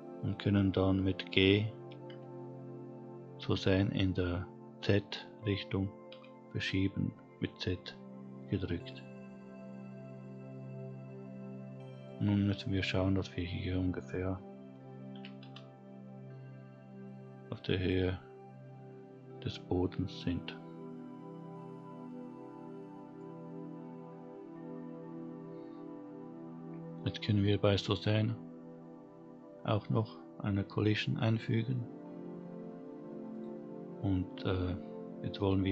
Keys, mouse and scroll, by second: 0.8 g, 11.1-13.8 scroll up 3, 13.8 g, 17.9-19.7 scroll down 5, 19.7-20.7 middle drag, 21.0-21.6 scroll down 3, 21.6 middle click, 32.0 click, 33.1-34.4 scroll down 1, 34.4 click.